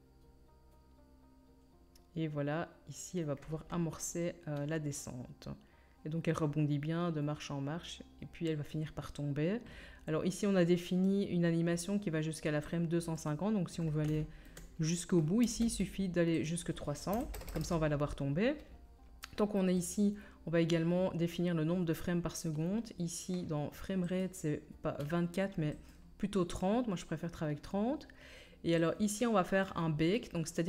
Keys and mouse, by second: 6.2-19.9 middle drag, 15.4 space, 17.4 KP_0, 19.9-24.1 drag, 24.1-30.6 middle drag, 27.5-30.6 drag, 27.5-30.6 right drag.